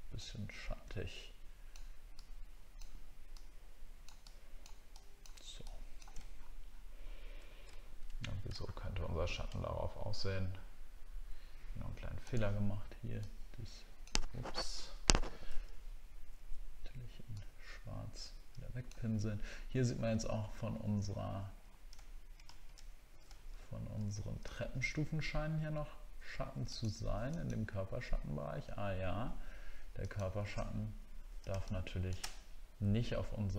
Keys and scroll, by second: 6.3 alt+scroll down 1, 7.7 alt+scroll down 1, 8.7 alt+scroll up 1, 22.1 alt+scroll down 1, 23.3 alt+scroll up 1, 24.5 alt+scroll down 1, 30.7 alt+scroll down 1.